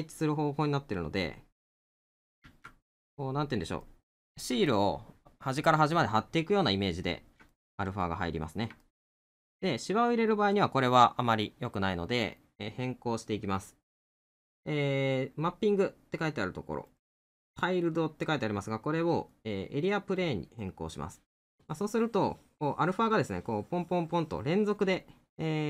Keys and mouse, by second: 0.2 middle click, 3.9 middle click, 7.5 middle click, 25.0 middle click.